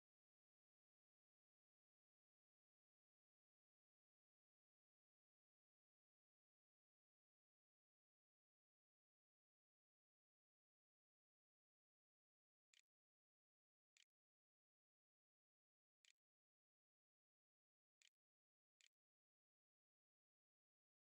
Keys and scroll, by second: 11.4-15.7 typing, 15.8 Tab, 18.3 ctrl+z, 18.4 ctrl+s.